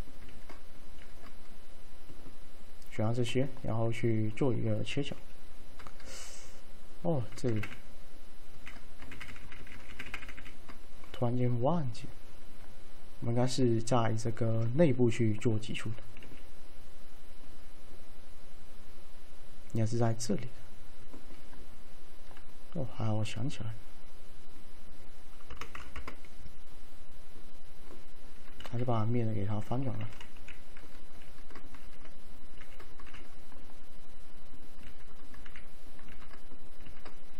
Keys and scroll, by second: 7.7 ctrl+z, 7.8 ctrl+z, 16.3 alt+q, 25.4-26.3 typing, 28.7 ctrl+a, 30.4 2, 31.3 ctrl+x, 31.9 ctrl+x.